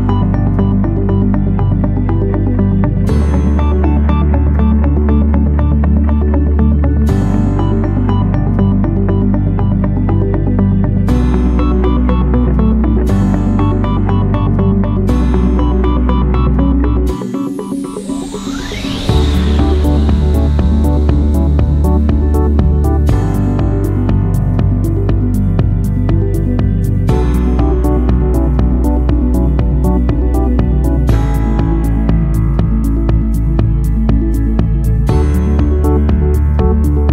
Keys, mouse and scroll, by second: 0.2 7, 0.5 0, 0.9 Return, 12.3 click, 13.1 click, 26.4 ctrl+8.